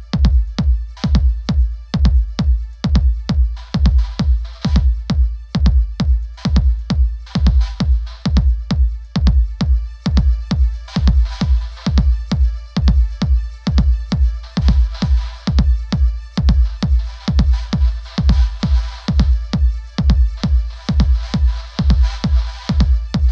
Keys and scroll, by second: 14.6 shift+Up.